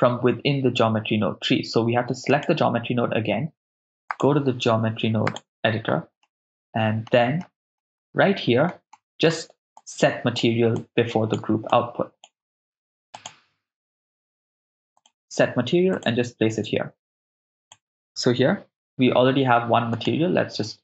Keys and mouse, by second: 2.3 click, 4.1-5.5 drag, 6.2 ctrl+middle click, 7.4 middle click, 8.1 ctrl+middle click, 8.9-9.4 middle drag, 9.8-10.4 drag, 10.8-11.1 drag, 11.7 click, 11.9-12.6 drag, 12.6 shift+a, 12.8 shift+a, 17.7-20.3 drag.